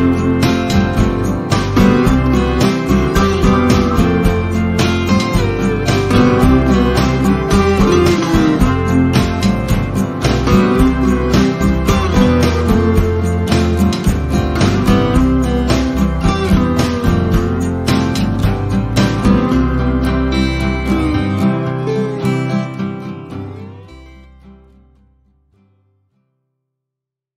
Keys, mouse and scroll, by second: 1.3 F1, 1.6 click, 2.1 ctrl+z, 2.8 click, 4.1 1, 4.3 Return, 5.3 shift+click, 5.9 ctrl+shift+a, 6.9 click, 9.2 Delete, 11.0 z, 12.0-12.9 click, 13.0 F1, 13.7 ctrl+shift+s, 15.0 s, 16.6-17.5 typing, 18.3 Return, 20.5 click, 20.9 ctrl+shift+d, 22.4 click, 25.4 F12, 26.8 click.